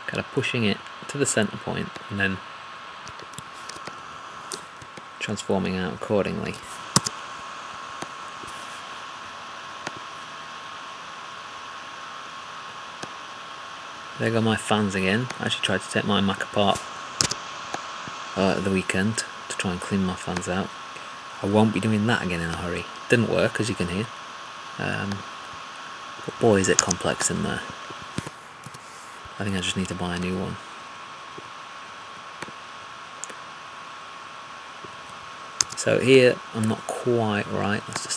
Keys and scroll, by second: 3.5 alt+`.